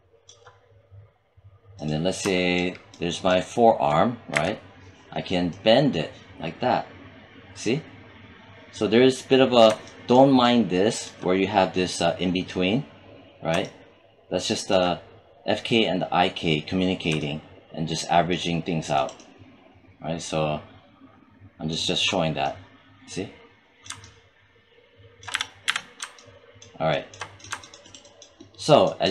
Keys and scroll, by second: 4.2 e, 25.2 z.